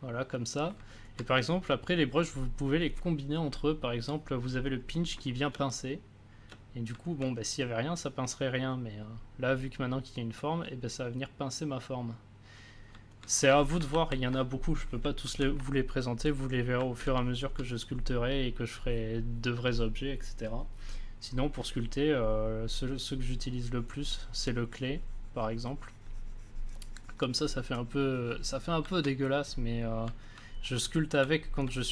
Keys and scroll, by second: 5.5 space, 13.9 ctrl+z, 15.2 ctrl+z, 31.0 ctrl+z.